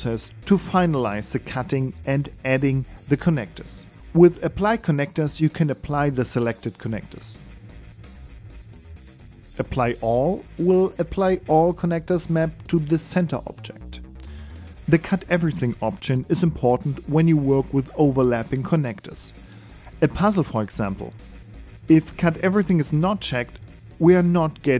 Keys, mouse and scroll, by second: 1.1 alt+z, 1.7 right click, 2.1 middle click, 2.6 g, 3.9 middle click.